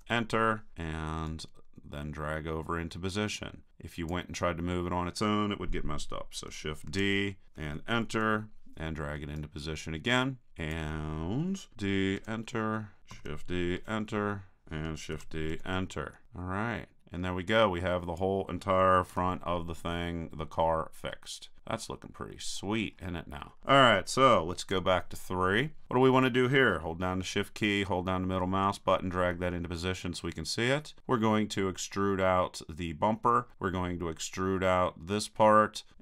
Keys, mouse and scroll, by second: 1.3-4.1 drag, 6.9 shift+d, 9.3-10.5 drag, 11.7 shift+d, 13.1 shift+d, 14.6 click, 15.1 shift+d, 16.2-18.1 drag, 19.1 a, 21.1 click, 22.3 middle click, 24.7 KP_3, 28.9 middle click, 29.2-31.0 middle drag.